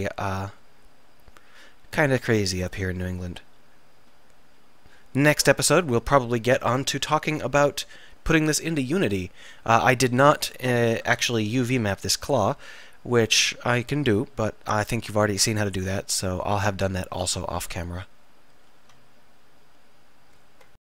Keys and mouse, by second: 1.7 middle click, 11.1 Tab, 12.1-13.4 middle drag, 13.6 middle click, 14.0 middle click.